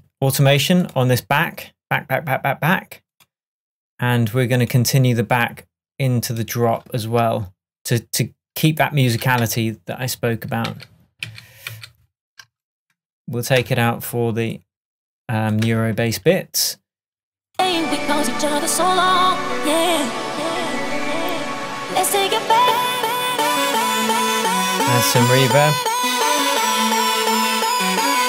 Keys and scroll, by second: 13.7 BackSpace, 15.7 BackSpace.